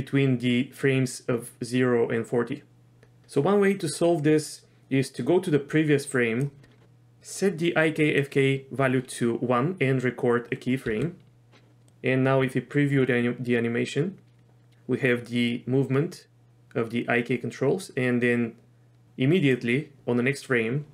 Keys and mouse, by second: 0.8-3.2 drag, 5.2 click, 7.5 click, 10.9 i, 11.9-19.5 drag.